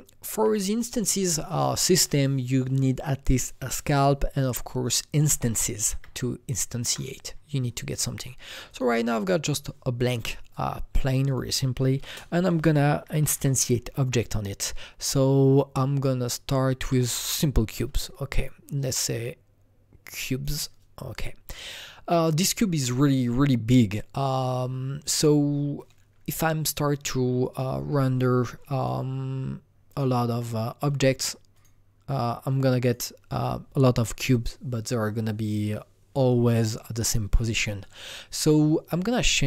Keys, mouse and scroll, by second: 0.3 Right, 5.1 Escape, 5.1 Right, 5.9 Tab, 9.4 alt+Tab, 9.4 click, 10.5-13.0 drag, 12.0 ctrl+space, 12.6-13.3 typing, 14.0 Up, 16.8 Up, 16.8 ctrl+space, 16.8 typing, 16.9 Return, 18.6-24.0 drag, 27.5-28.8 drag, 28.8-29.9 drag, 29.9 click.